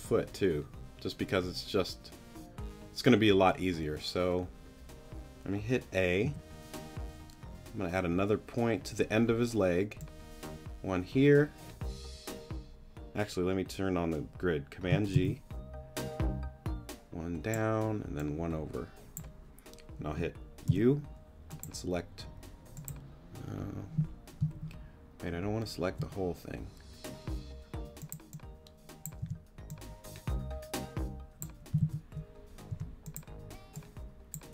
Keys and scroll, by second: 6.2 a, 15.1 super+g, 20.7 u, 24.5 super+z, 29.2 t, 31.8 super+z, 32.7 super+t.